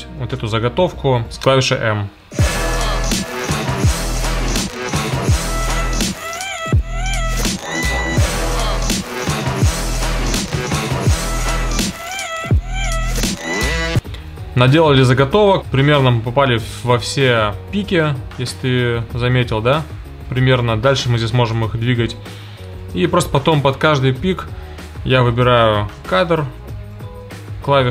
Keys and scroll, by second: 2.0 space, 25.3 i, 26.2 o.